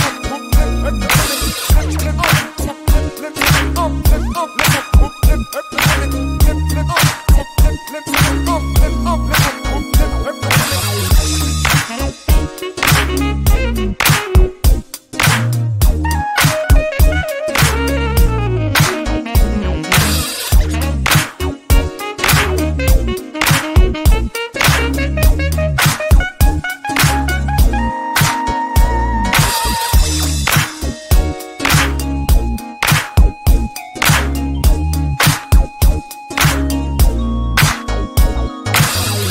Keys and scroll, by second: 6.5 9, 7.3 6, 8.9 Return, 22.7 Home.